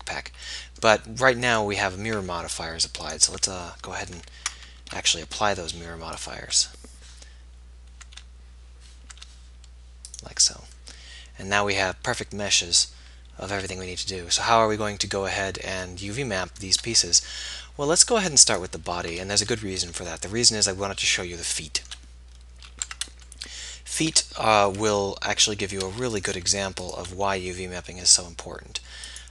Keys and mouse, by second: 0.1 alt+h, 4.4 ctrl+h, 7.7 Tab, 9.2 Tab, 14.8-19.3 middle drag, 19.3-23.1 drag, 23.1 Tab, 27.5 s.